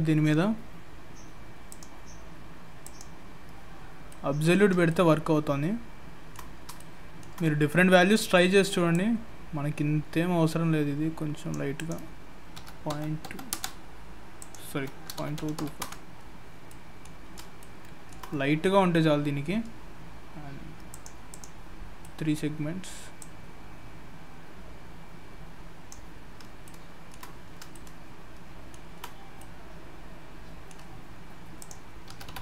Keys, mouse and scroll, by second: 1.7 click, 3.8-4.5 scroll down 3, 4.1 middle click, 4.9 shift+middle click, 6.8 middle click, 7.9 middle click, 8.9 click, 11.7 click, 14.4 click, 16.7 middle click, 17.2 scroll up 2, 17.6 shift+middle click, 20.9 click, 21.3 click, 21.8-23.2 scroll down 4, 22.0 middle click, 23.2 click, 26.2 scroll up 3, 26.6 shift+middle click, 27.5 scroll up 2, 27.7 shift+middle click, 29.4 middle click, 31.6 click.